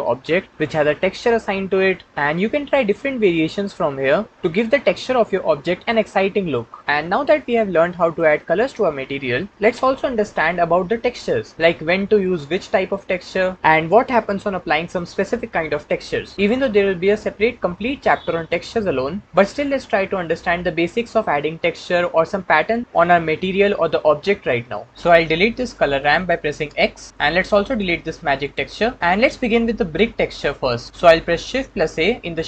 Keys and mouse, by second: 26.6 x, 27.1-27.6 drag, 28.0 x, 28.2 click, 31.5 shift+a.